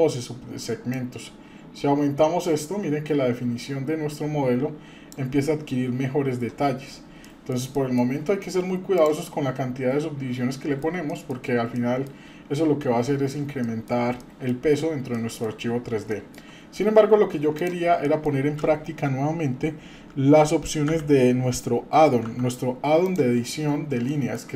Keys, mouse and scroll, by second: 0.9-5.2 drag, 6.7-7.2 scroll down 2, 7.2 middle click, 7.8 shift+middle click, 8.9 click, 10.5 middle click, 11.1 shift+middle drag, 11.7 middle click, 13.6-14.0 shift+middle drag, 14.2 middle click, 14.8 scroll up 2, 15.1-15.5 shift+middle drag, 15.7 scroll down 2, 16.1-16.4 shift+middle drag, 16.6 scroll up 2, 17.0-17.3 scroll down 1, 17.6 click, 18.0 shift+middle click, 20.9 g, 24.1-24.5 shift+middle drag.